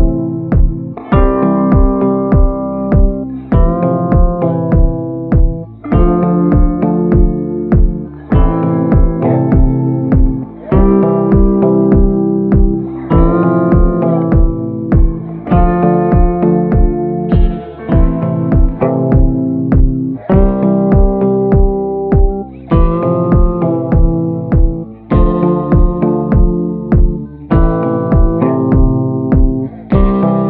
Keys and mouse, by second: 0.7 middle click, 1.9 b, 2.7-3.7 middle drag, 4.0 b, 4.7 b, 5.3 b, 6.8 middle click, 7.2 click, 9.3 ], 9.6 ], 9.7-11.3 drag, 9.7 ], 12.2 middle click, 12.8 middle click, 13.7 click, 14.3 a, 15.8 middle click, 16.2-18.3 middle drag, 18.7 middle click, 19.7 middle click, 20.1 shift+middle click, 20.5-21.6 middle drag, 21.7-22.7 drag, 23.5 middle click, 24.3 middle click, 26.8 ctrl+z, 26.9-28.0 middle drag, 29.5 middle click, 30.2-30.4 middle drag.